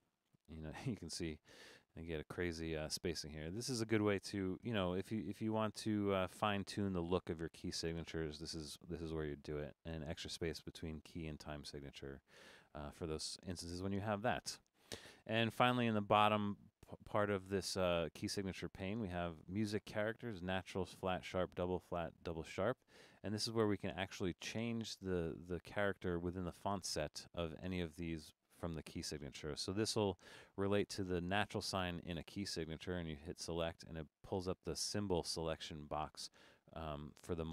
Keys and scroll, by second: 4.7 0.